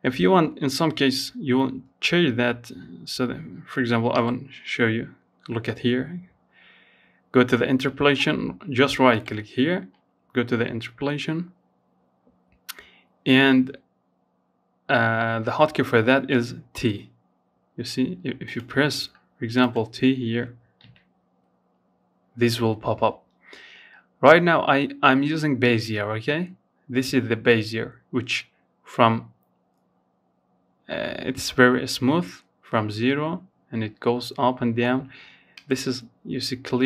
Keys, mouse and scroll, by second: 2.3-19.0 right drag, 19.0 t, 33.7-36.8 drag.